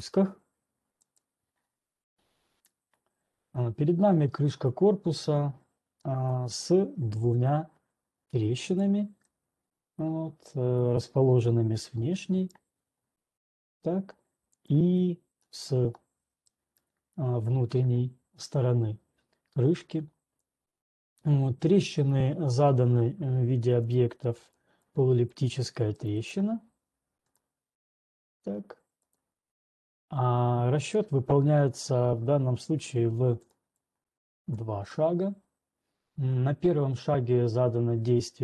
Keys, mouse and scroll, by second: 1.4 alt+click, 6.2-7.0 scroll, 7.8 click, 8.9-10.8 drag, 10.8-11.8 middle drag, 11.8 click, 11.8-12.2 scroll, 12.4 right click, 12.8 right click, 12.8-13.3 scroll, 13.3-13.8 scroll, 14.8 click, 14.8 scroll, 15.3 middle click, 15.8 scroll, 16.3-17.4 scroll, 17.4 right click, 17.4 scroll, 20.3-20.7 scroll, 24.0 ctrl+1, 24.3 click, 25.3 click, 25.9 click, 26.6 right click, 28.4 click, 31.0 click, 31.5-31.9 scroll, 32.1-32.6 scroll, 33.6 ctrl+1, 33.8 click, 34.9 click.